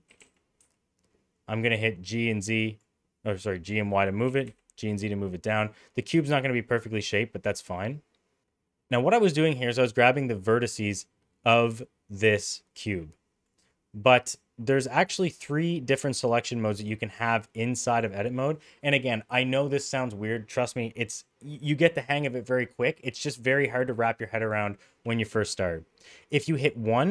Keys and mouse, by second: 0.0 g, 3.4 middle click, 4.2 g, 5.9 middle click, 6.6 middle click, 7.4 middle click, 12.9 middle click, 26.1 right click, 26.9 middle click.